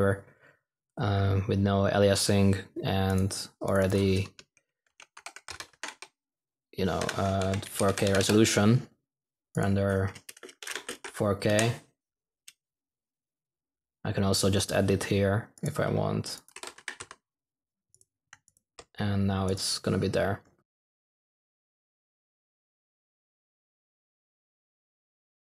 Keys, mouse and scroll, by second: 16.5 typing, 21.0 typing.